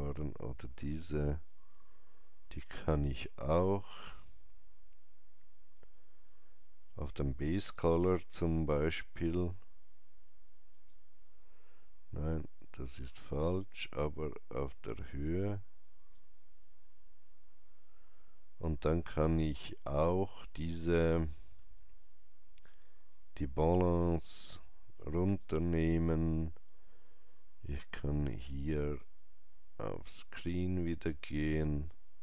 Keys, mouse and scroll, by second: 2.7-18.7 drag, 2.7 typing, 21.1 click, 21.1 scroll down 1, 23.0-27.8 drag, 28.8-31.4 drag, 28.8-30.2 scroll down 1, 31.4-32.2 drag.